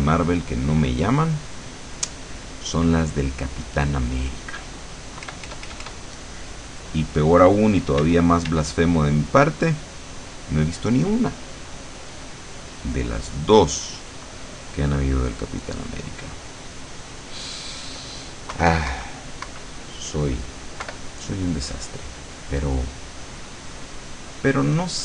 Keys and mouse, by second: 1.3 click, 2.1 click, 5.4 KP_Add, 6.3 middle click, 8.1 d, 9.1-12.2 drag, 12.3-15.1 drag, 15.7-17.2 drag, 18.7 KP_Subtract, 20.9 KP_Subtract, 21.6-25.0 drag.